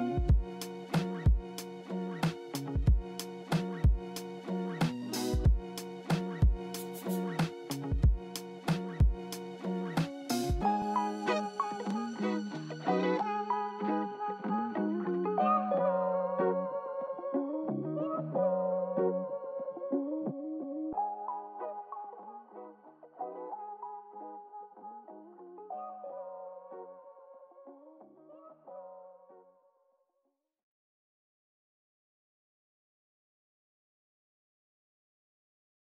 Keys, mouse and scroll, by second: 3.0-4.1 scroll up 7, 4.1 scroll down 1, 4.3 middle click, 5.0 s, 7.8 scroll up 1, 7.9 scroll down 5, 8.1-8.6 scroll up 1, 8.6 middle click, 9.1 middle click, 10.7 right click, 12.7-13.1 scroll down 3, 13.1 middle click, 13.7-14.2 scroll up 2, 19.6-20.1 scroll up 2, 20.1-20.8 scroll up 3, 20.8 middle click, 20.9 middle click, 26.1 0, 26.4 Return, 27.8 middle click, 28.8 w, 29.1 w, 29.2-30.1 scroll up 2, 30.1 middle click, 32.8 s, 33.0 w, 33.1-33.4 scroll down 7, 34.1 alt+middle click, 34.2 alt+middle click.